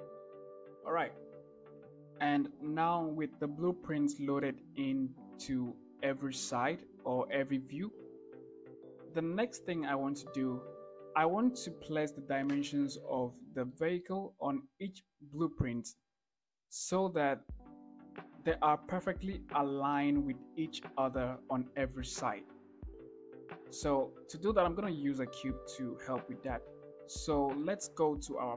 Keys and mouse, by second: 0.5 shift+drag, 1.1 shift+click, 3.5-4.0 shift+middle drag, 11.2 shift+middle click, 13.3-13.6 shift+drag, 26.9-27.2 shift+middle drag, 28.0 KP_1.